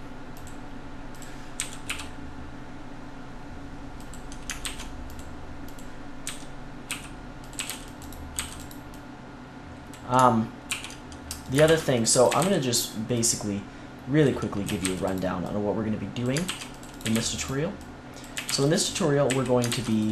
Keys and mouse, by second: 1.5 s, 4.6 ctrl+r, 6.2 s, 7.5 a, 7.6 c, 8.3 c, 10.6 ctrl+t, 11.4 click, 11.6 ctrl+r, 12.2 a, 12.3-14.2 drag, 12.3 c, 14.6 a, 14.8 c, 16.4 ctrl+r, 17.0 a, 17.1 c, 18.3-20.1 typing, 19.6 ctrl+r.